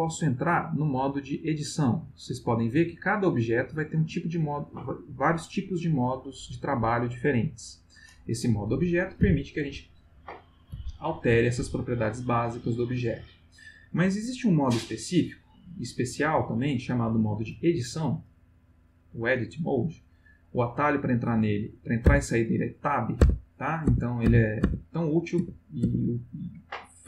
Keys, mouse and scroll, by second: 0.1 click, 9.2 g, 11.3 Escape, 18.2 click, 20.0 click, 22.1 Tab, 23.2 Tab, 23.8 Tab, 25.3 Tab.